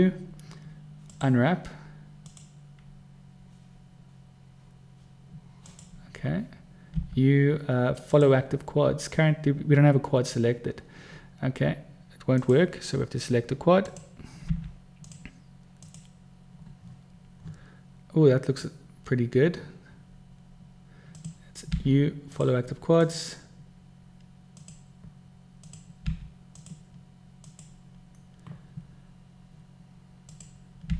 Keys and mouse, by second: 0.0 u, 2.6 click, 6.0 click, 7.3 u, 14.1 click, 14.8 u, 21.4 click, 22.1 u, 24.9 click, 26.4 u, 30.6 click.